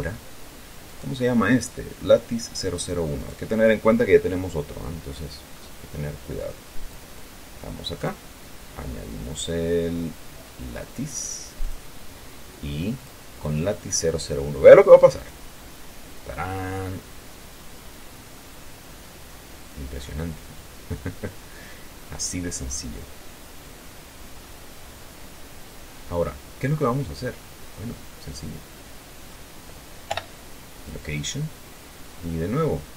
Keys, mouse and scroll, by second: 1.2 right click, 3.5 right click, 7.2 click, 8.3 click, 12.0 click, 13.4 click, 15.5 click, 16.5-17.0 scroll down 2, 17.0-21.5 drag, 21.5-23.4 scroll up 4, 23.6 scroll down 2, 24.7-26.1 middle drag, 26.1-30.1 drag, 30.4 i, 31.1 click.